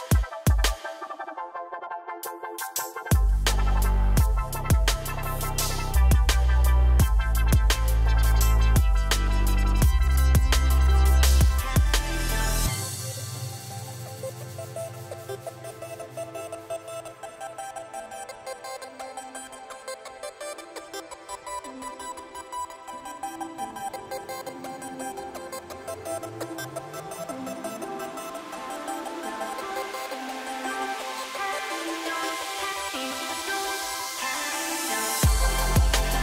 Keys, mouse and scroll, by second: 0.9-1.4 middle drag, 1.4 click, 1.6 shift+drag, 2.0 F3, 3.0 click, 3.3 shift+click, 3.7 F3, 5.0 drag, 5.3 shift+click, 5.8 F3, 6.9-7.6 middle drag, 7.6 click, 7.9 shift+click, 8.2 F3, 9.2 drag, 9.6 shift+click, 10.1 F3, 11.2 click, 11.5 shift+click, 11.8 F3, 13.0 click, 13.3 shift+click, 13.6 click, 14.1 shift+drag, 14.7 F3, 15.9-16.7 middle drag, 16.7 Tab, 16.9 click, 18.1 click, 18.4-18.8 scroll down 1, 18.8-19.3 middle drag, 19.3 click, 19.8 Tab, 20.1 click, 20.8 middle click, 21.7 click, 21.9-22.6 middle drag, 22.6 click, 23.7 drag, 24.7 s, 26.1 Tab, 26.3 click, 26.6 click, 27.1 Tab, 27.8 F3, 29.7 click, 30.1 Tab, 30.3 click, 31.1 click, 31.4-32.7 middle drag, 32.7 Tab, 32.9 click, 33.4 ctrl+r.